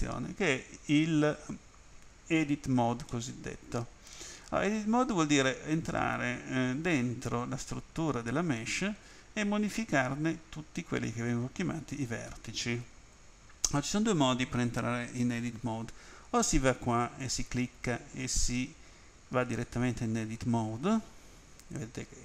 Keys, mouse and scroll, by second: 3.1 middle click, 17.2 click, 19.6 click.